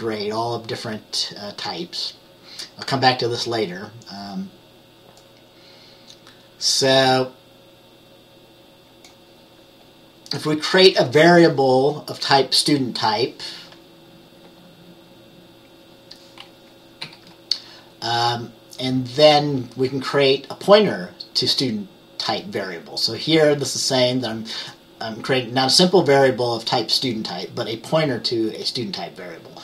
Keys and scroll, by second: 17.1 F10.